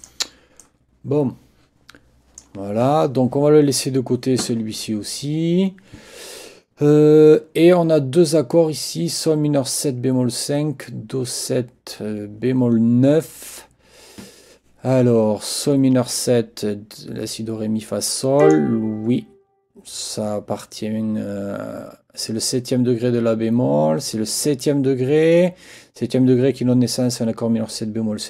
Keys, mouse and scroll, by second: 0.0 click, 0.6-2.6 drag, 18.4 click.